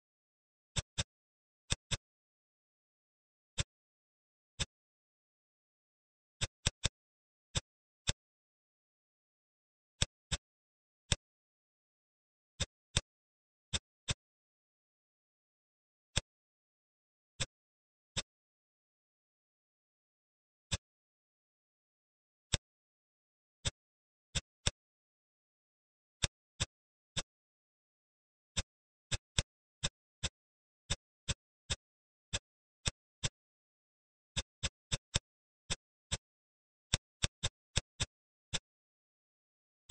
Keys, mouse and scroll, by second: 0.7 click, 0.8 middle click, 1.3 Tab, 1.6 drag, 1.8-4.1 middle drag, 4.1-4.4 scroll down 3, 4.4 click, 4.9 s, 6.5 click, 6.7 middle click, 7.4 drag, 7.9 shift+click, 8.6 h, 9.8 click, 10.1-10.5 middle drag, 10.5-10.9 scroll up 4, 10.9-11.2 middle drag, 11.4-12.4 scroll up 2, 12.4 click, 12.8 shift+click, 13.2 x, 13.9 drag, 14.2-16.0 scroll up 20, 16.0-17.3 drag, 17.3 middle click, 18.0-19.0 drag, 19.0-20.5 scroll down 25, 20.5 click, 21.3-22.5 scroll up 8, 22.5 click, 22.7-23.5 scroll up 1, 23.5 click, 24.2 middle click, 24.5 click, 25.0 Tab, 26.1-28.5 drag, 29.0 shift+click, 29.2 shift+click, 29.7 shift+click, 30.1 middle click, 30.7 shift+click, 31.1 shift+click, 31.6 shift+click, 32.1 middle click, 32.6 shift+click, 33.1-34.3 middle drag, 34.3 shift+click, 34.4 shift+click, 34.8 shift+click, 35.0 shift+click, 35.6-36.9 middle drag, 37.1 shift+click, 37.3 shift+click, 37.6 shift+click, 37.8-39.7 middle drag, 39.7 shift+click.